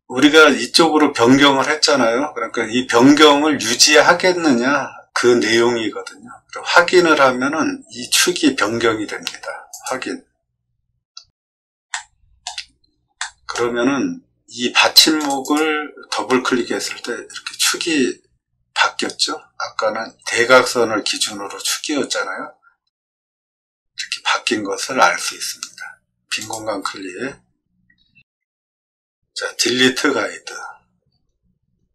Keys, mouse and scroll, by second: 9.7 click, 11.1 middle click, 11.8 middle click, 13.1 middle click, 15.1 click, 15.4 click, 26.3 click, 28.0 scroll down 1, 28.5 middle click, 28.6 middle click, 29.9 d, 30.9 middle click, 31.0 middle click, 31.5 middle click, 31.5 scroll up 1.